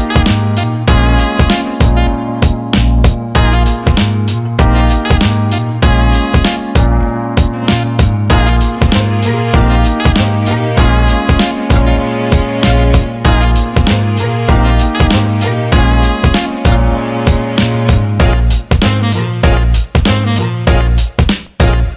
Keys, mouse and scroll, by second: 5.7 click, 7.2 click, 7.5 alt+middle click, 8.7 click, 8.9 alt+middle click, 10.2-12.2 right drag, 12.9 alt+middle click, 14.1 alt+middle click, 15.0 shift+click, 15.8 alt+middle click, 16.3-17.9 right drag, 18.4 alt+middle click, 19.1 click, 19.9-21.9 alt+middle drag.